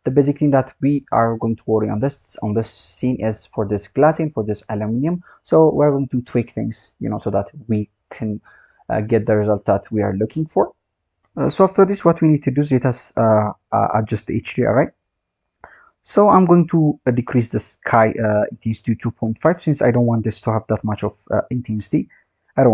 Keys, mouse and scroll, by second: 0.6 click, 1.2-2.0 scroll down 9, 3.3-4.5 scroll up 5, 4.5 click, 4.8-5.4 scroll down 4, 5.4 scroll down 3, 6.6-9.6 scroll down 3, 9.8-10.8 scroll up 7, 10.8 scroll down 3, 16.3-19.4 drag, 21.8-22.7 drag.